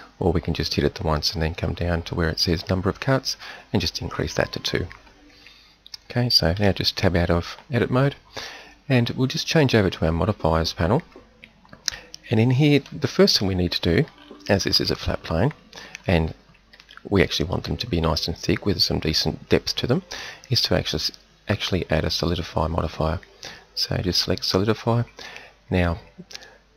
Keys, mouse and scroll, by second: 3.9 click, 6.6 Tab, 13.4 KP_1, 21.5-24.2 drag.